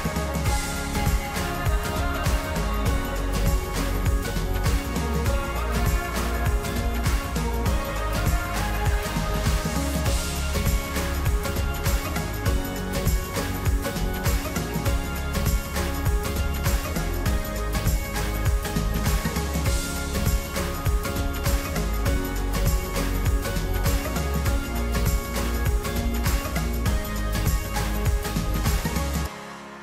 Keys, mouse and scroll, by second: 1.1-2.4 drag, 5.2-6.6 drag, 9.3-13.1 middle drag, 13.1 click, 17.6-21.2 middle drag, 21.2-24.2 drag, 25.8-26.8 drag, 26.8-28.3 middle drag, 28.3 click.